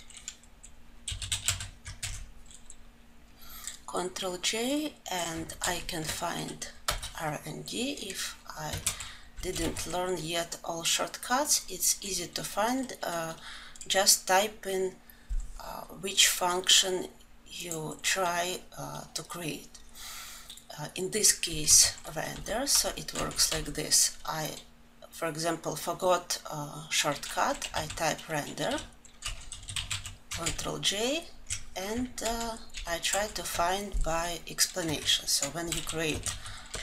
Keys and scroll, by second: 1.7 ctrl+j, 6.6 Return, 9.1 ctrl+alt+l, 30.2 ctrl+j.